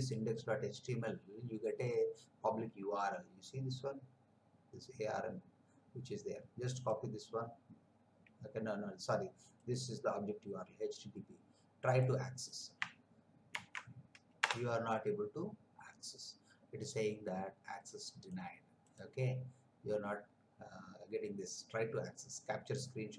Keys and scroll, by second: 13.5 ctrl+v, 14.4 Return.